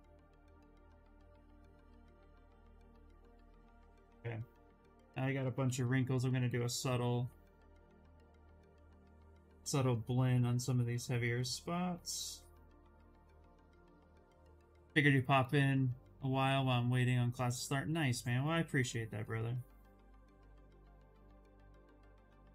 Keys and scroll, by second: 1.3 s, 3.6 b, 5.3 s.